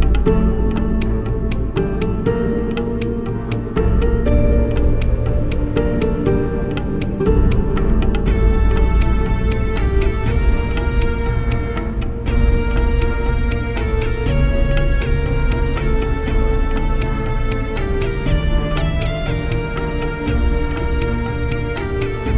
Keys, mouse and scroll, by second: 0.5-3.5 right drag, 3.5-7.5 middle drag, 6.6-10.1 right drag, 10.1 middle click, 11.3 ctrl+t, 11.8 ctrl+t, 13.3 alt+j, 14.1 middle click, 15.5 alt+j, 19.8 click, 19.8-22.3 right drag.